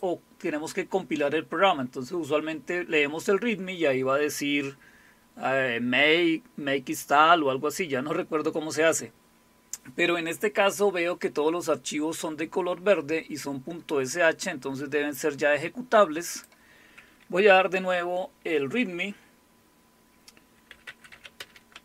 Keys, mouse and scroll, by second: 16.3 click, 20.5-21.8 typing.